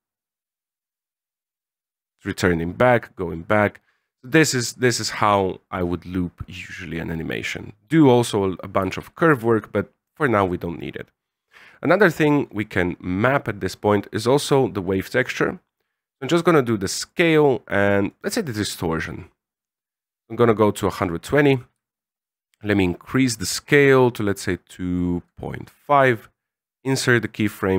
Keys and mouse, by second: 8.8 alt+a, 11.9 click, 13.7 middle click, 16.4 right click, 18.1 right click, 19.8-20.9 drag, 21.7-25.0 shift+drag, 25.7 right click, 27.3-27.7 drag.